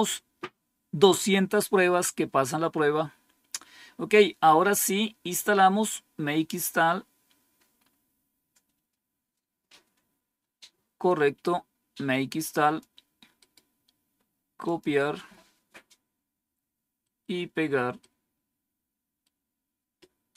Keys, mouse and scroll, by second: 7.7-9.5 scroll up 2, 9.5 scroll down 1, 11.0-12.7 drag, 13.3 right click, 14.6 click, 15.6-16.9 scroll down 2, 16.9 right click, 17.9-19.2 right drag.